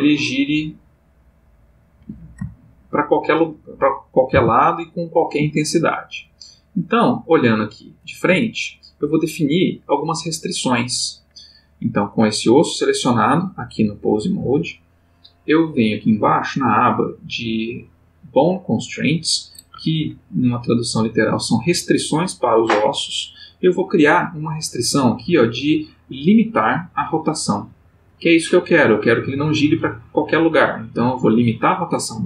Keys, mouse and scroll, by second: 1.9 Escape, 2.5 ctrl+middle click, 4.3 r, 5.4 Escape, 6.6 click, 7.4 click, 8.4-9.1 shift+middle drag, 12.3 click, 16.7 click, 23.4 click, 31.2 click.